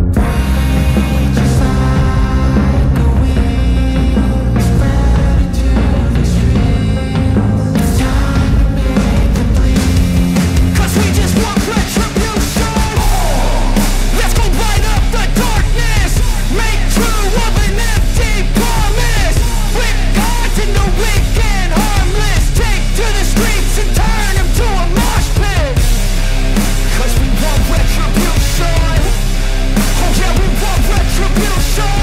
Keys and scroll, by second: 3.8 ctrl+alt+z, 19.6 ctrl+=, 21.7 ctrl+=.